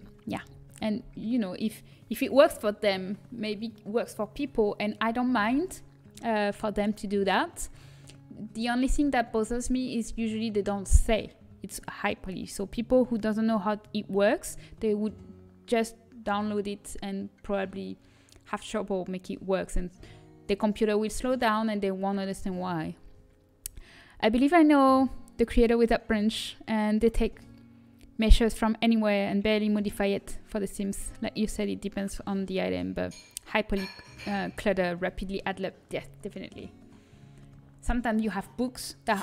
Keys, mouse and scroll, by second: 36.8-37.1 scroll up 1.